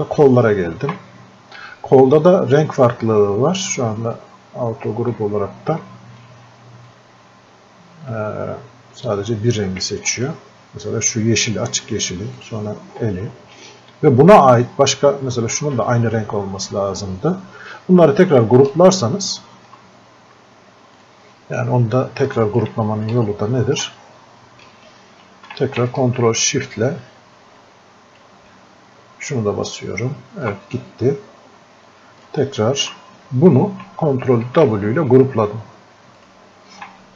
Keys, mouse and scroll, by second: 4.2-10.2 drag, 12.4 ctrl+click, 13.8-15.1 scroll up 1, 16.5 scroll up 1, 18.7 ctrl+click, 23.1-31.9 ctrl+drag, 32.3-34.5 ctrl+shift+drag, 34.5 ctrl+w, 36.2-37.1 ctrl+shift+drag.